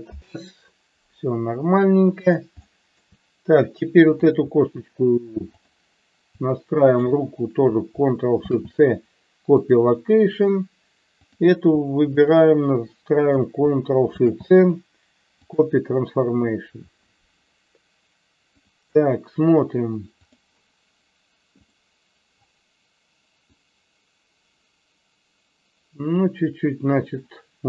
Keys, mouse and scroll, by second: 2.6-3.0 shift+middle drag, 4.2 click, 5.6 click, 6.9 shift+click, 11.3 click, 18.5 click, 23.5-27.6 drag.